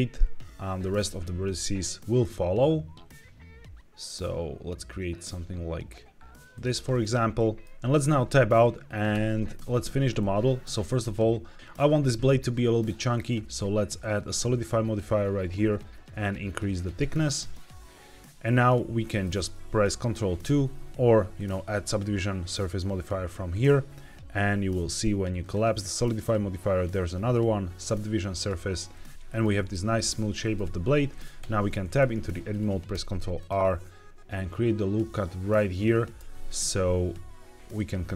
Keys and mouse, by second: 6.4 click, 7.2 middle click, 9.0 Tab, 10.1-10.6 middle drag, 13.1-15.0 drag, 15.7-18.6 drag, 18.9 middle click, 20.2 ctrl+2, 21.3-23.4 drag, 25.3 click, 28.9 middle drag, 29.2 middle click, 30.3 shift+middle click, 31.0 middle click, 31.3 Tab, 31.7 middle click, 32.8 ctrl+r, 35.6 click, 36.1 ctrl+r, 37.5 click.